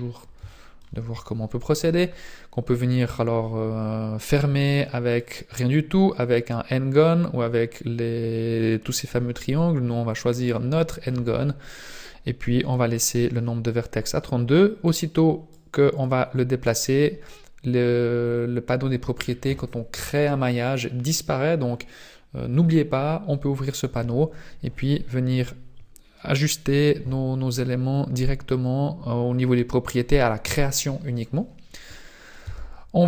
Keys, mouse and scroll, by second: 0.5 shift+middle click, 5.1 click, 14.8 click, 17.1 scroll down 1, 17.2 scroll up 2, 32.4 Tab.